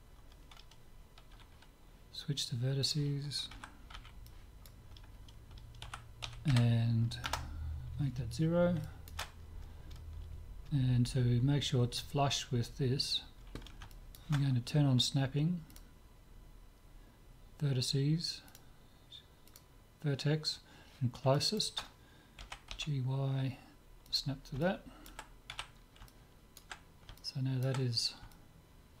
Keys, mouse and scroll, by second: 1.3 z, 2.8-4.8 drag, 3.5 a, 4.0 b, 5.8 s, 8.8-11.4 middle drag, 13.9-15.7 middle drag, 15.7-17.6 drag, 18.5-20.3 drag, 21.4-23.5 middle drag, 22.4 g, 24.6-29.0 middle drag, 25.5 z.